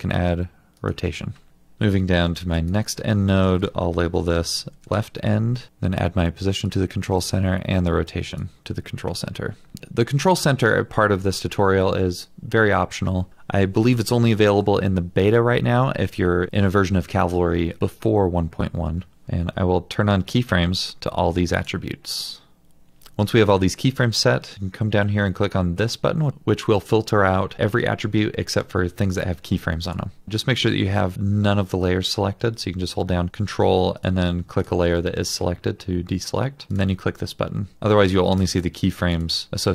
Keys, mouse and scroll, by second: 1.7-2.7 scroll down 1, 3.6 Return, 3.9-5.3 typing, 5.7 right click, 30.3 ctrl+click, 34.0 ctrl+click, 34.7 ctrl+click.